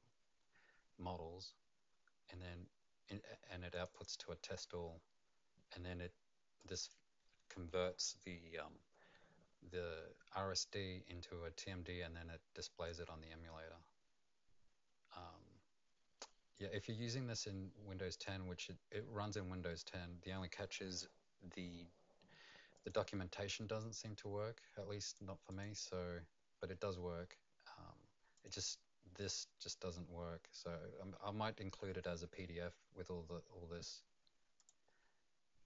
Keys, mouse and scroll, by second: 3.7 click, 3.9 click, 6.8 click, 17.4 click, 19.9 scroll up 1, 22.7 click, 25.0 click, 25.5 click, 28.3 click, 34.6 click.